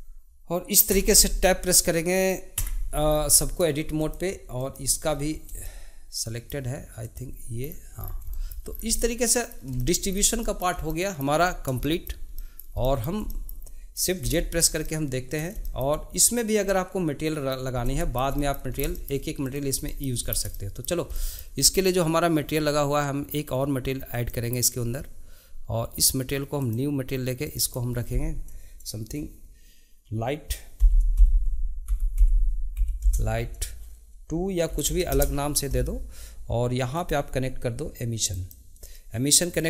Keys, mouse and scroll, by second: 0.9 Tab, 2.6 Tab, 3.0 scroll down 2, 3.4-3.9 middle drag, 3.9 click, 4.6 click, 5.1-5.6 scroll up 1, 5.6-7.0 shift+middle drag, 7.0 click, 7.6 scroll down 2, 8.3-8.7 shift+middle drag, 8.7 scroll down 1, 8.9-10.1 middle drag, 10.1-10.4 scroll down 2, 10.4-11.4 shift+middle drag, 11.4-11.8 scroll up 1, 11.8-14.3 shift+middle drag, 14.3 shift+z, 14.6 scroll down 1, 14.8-17.7 middle drag, 17.7 scroll up 2, 18.0-18.7 shift+middle drag, 18.7 scroll up 2, 18.9-19.4 shift+middle drag, 19.4 click, 19.8 shift+middle click, 20.2 scroll up 2, 20.5-24.1 shift+middle drag, 24.1-27.5 drag, 27.6-30.7 drag, 36.9-39.6 drag.